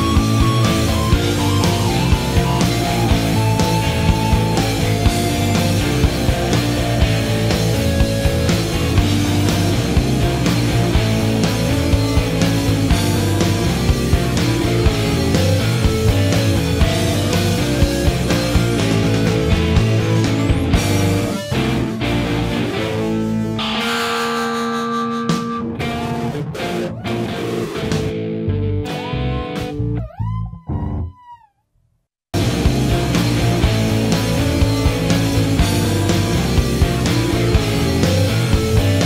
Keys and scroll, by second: 1.1-1.6 alt+scroll, 6.1 ctrl+z, 6.7 [, 19.3 ctrl+alt+z, 34.0-34.6 alt+scroll.